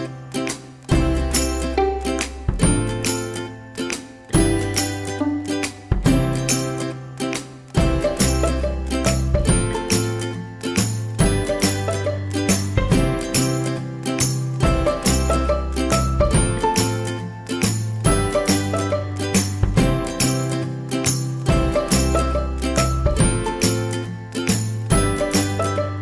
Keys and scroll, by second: 23.2 ctrl+z.